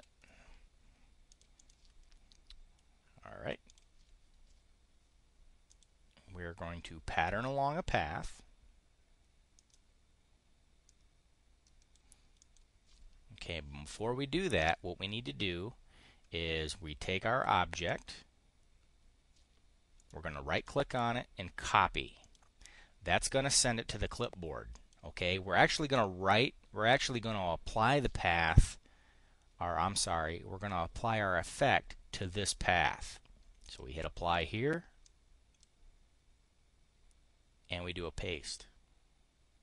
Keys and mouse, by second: 1.2 click, 1.5 click, 3.6 click, 5.7 click, 9.5 click, 10.8 click, 12.3 click, 17.8 click, 19.9 click, 22.1 click, 24.7 click, 33.5 click, 34.9 click, 38.4 click.